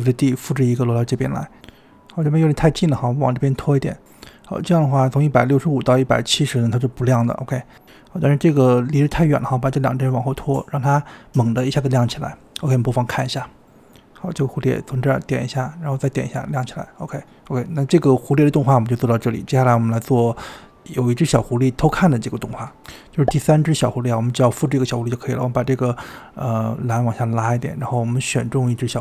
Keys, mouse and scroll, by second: 0.8 shift+d, 2.0 click, 4.6-6.0 drag, 6.0 space, 7.9 space, 8.3-9.5 drag, 9.8 click, 11.4 space, 13.6 space, 13.8-14.6 drag, 14.6 space, 17.4 space, 20.4-20.9 drag, 23.6 space, 24.1-28.9 drag.